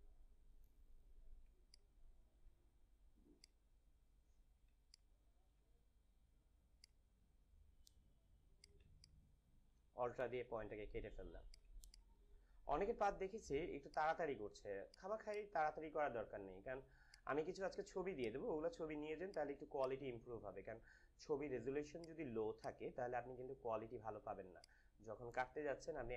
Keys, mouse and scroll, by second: 1.4 space, 1.7 click, 1.9 space, 3.4-4.7 drag, 4.7 space, 4.8 click, 5.2 space, 6.7-8.5 drag, 8.8 space, 8.9 click, 9.3 space, 11.4 click, 11.7 space, 11.8 click, 12.3 space, 13.8 click, 15.0 space, 15.5 space, 17.0 click, 19.5 space, 20.1 space, 21.9 click, 22.8 space, 24.5 click.